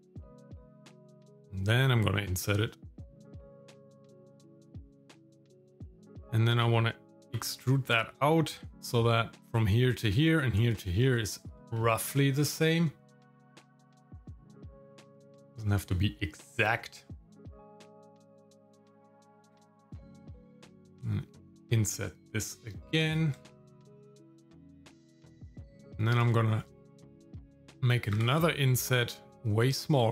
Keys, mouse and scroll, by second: 0.6 i, 3.9 shift+middle click, 4.9 middle click, 5.7 shift+middle click, 7.2 e, 8.7 middle click, 11.0 shift+middle click, 13.8 g, 15.9 shift+middle click, 17.0-17.3 scroll down 1, 17.5 shift+middle click, 17.9-18.9 scroll up 1, 19.5 i, 23.4-24.4 shift+middle drag, 24.5 scroll up 2, 24.9 shift+middle click, 25.9 shift+middle click, 26.6 middle click, 28.1 i.